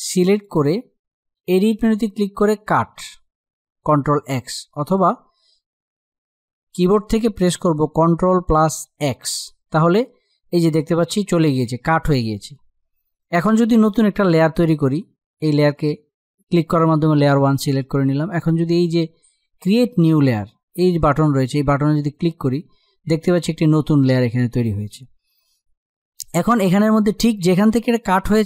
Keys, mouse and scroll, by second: 4.5 click, 7.6 click, 8.6 ctrl+x, 12.8 click, 21.8 click.